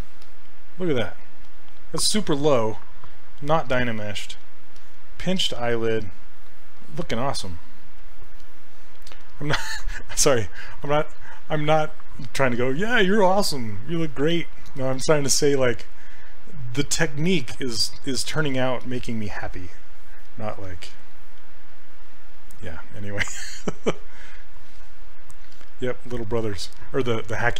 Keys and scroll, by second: 10.3 s.